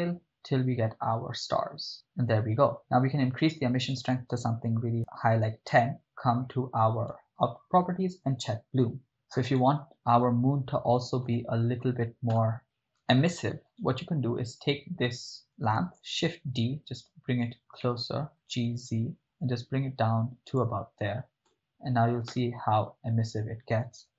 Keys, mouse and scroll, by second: 2.7 middle click, 3.8-4.9 drag, 5.9 click, 8.2 click, 9.7-11.3 right drag, 11.3 KP_0, 12.3 KP_0, 13.9 right click, 16.0 shift+d, 17.5 click, 17.9 middle click, 18.3 g, 18.8 z, 20.6 click, 22.4 KP_0, 24.0 g.